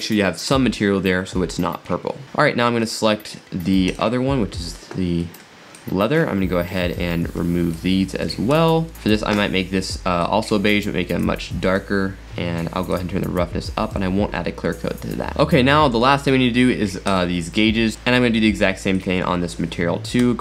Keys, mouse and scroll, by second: 2.8 click, 3.9 click, 5.2-5.8 middle drag, 5.8 drag, 6.7 middle click, 7.2-7.7 scroll down 6, 7.7 click, 8.7 x, 8.9 scroll up 5, 9.1 click, 12.2 middle click, 12.9-15.3 drag, 15.3 s, 17.0 click, 17.9 middle click, 18.1-18.5 scroll down 3, 19.0 click, 20.2 x.